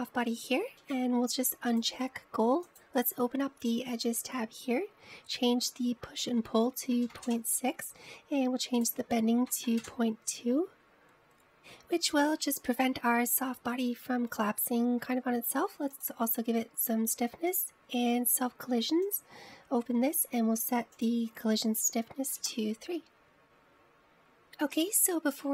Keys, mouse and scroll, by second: 0.6-1.8 drag, 1.8-2.8 scroll down 4, 2.8 click, 3.7-4.7 drag, 4.7-6.6 scroll down 10, 6.7-9.8 drag, 9.9-11.5 drag, 17.0 click, 18.7 click, 19.0-20.2 scroll down 5, 20.2-20.6 drag, 20.6-22.1 scroll down 9, 22.1-24.4 drag.